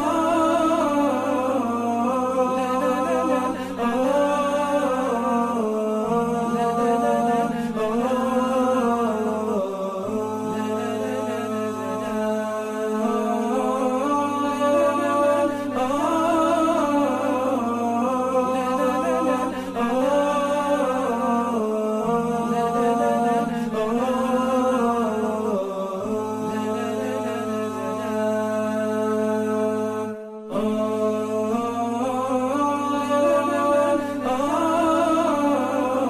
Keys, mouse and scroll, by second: 13.1-14.6 scroll up 1, 25.6 Delete, 30.1 alt+scroll down 1, 31.6 alt+scroll down 1, 31.7 shift+click.